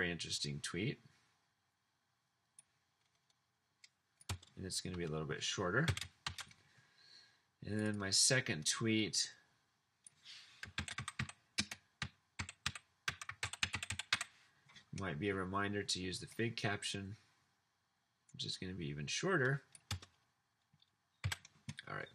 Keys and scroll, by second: 4.3 BackSpace, 4.9 BackSpace, 5.8 Delete, 6.2 e, 10.7-14.7 typing, 19.9 BackSpace, 21.2 Delete.